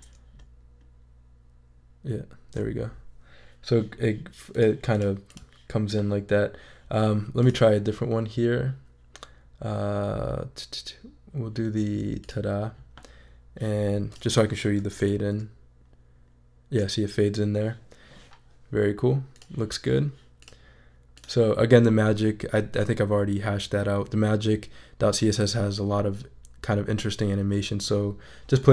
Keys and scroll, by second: 14.8 shift+super+e.